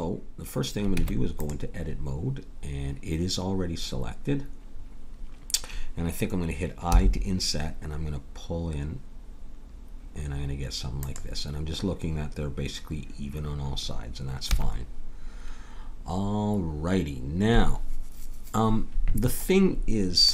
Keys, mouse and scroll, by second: 1.0 Tab, 6.9 i, 14.5 a.